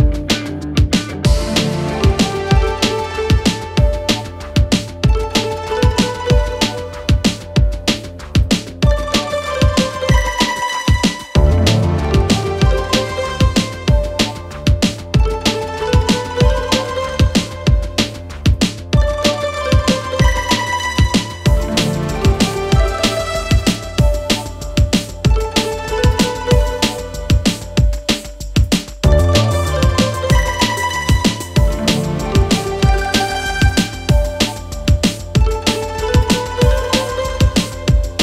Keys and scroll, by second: 0.1 ', 0.5 Return, 37.4 Delete.